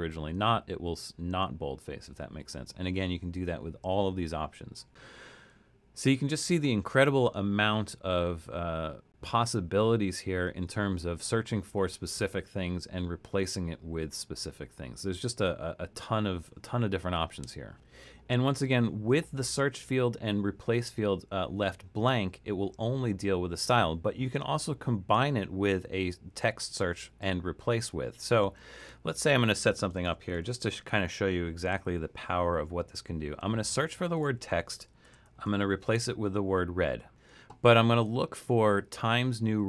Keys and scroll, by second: 29.8-31.4 typing, 34.8-35.9 typing.